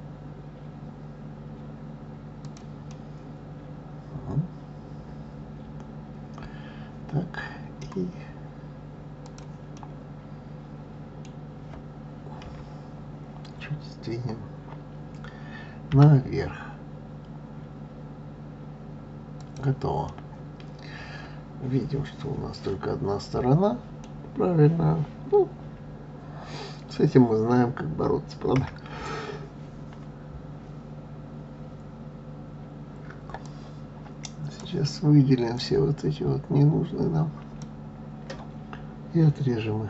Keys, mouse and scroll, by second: 2.9-5.9 middle drag, 9.2 click, 9.7-12.4 middle drag, 12.4 KP_3, 15.9 g, 20.0-23.1 middle drag, 28.5 KP_1, 33.4-35.5 drag.